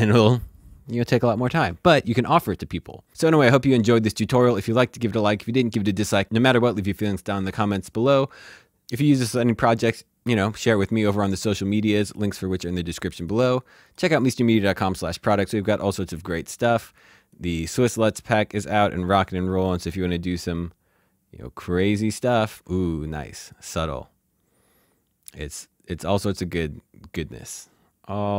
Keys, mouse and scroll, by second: 8.1 click, 15.1 s, 15.7 right click, 17.2 right click, 21.6 right click, 23.0 click, 23.4 right click.